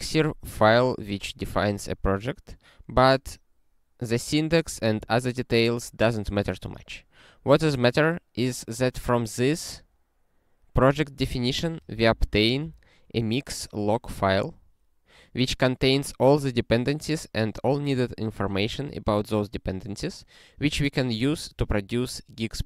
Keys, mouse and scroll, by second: 7.5 scroll down 7, 11.7 ctrl+f.